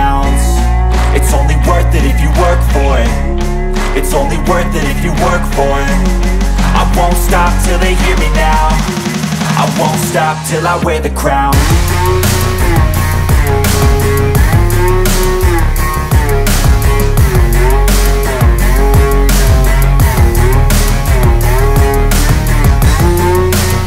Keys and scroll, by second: 0.2 ctrl+Page_Down, 1.1 Escape, 4.8 ctrl+Page_Down, 5.8 Escape, 13.6 shift+Page_Up.